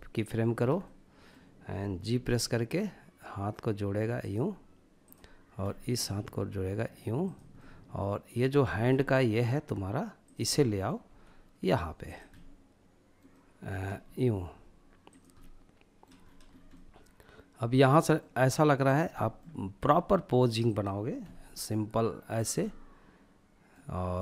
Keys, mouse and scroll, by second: 1.1 g, 3.2 click, 4.0 click, 4.6-5.2 middle drag, 5.2 g, 6.2-6.5 drag, 6.5-7.6 middle drag, 7.6 scroll down 2, 7.9-9.2 middle drag, 9.2 click, 9.5-10.0 middle drag, 10.0 g, 11.0 click, 11.3-12.2 middle drag, 12.3-13.0 middle drag, 13.0 g, 14.1 click, 14.4-15.2 middle drag, 15.2-15.7 scroll up 2, 15.7-17.1 middle drag, 17.8-18.1 drag, 18.1-18.5 middle drag, 18.6 g, 19.6 click, 20.2 r, 21.4 click, 21.6-24.2 middle drag.